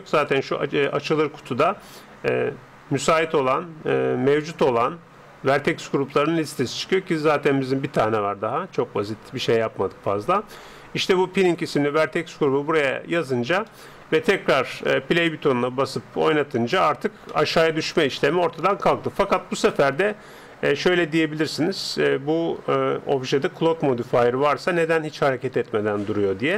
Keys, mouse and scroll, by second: 13.7-16.7 middle drag, 16.2-18.1 drag, 16.9-19.0 middle drag, 19.9-21.7 middle drag.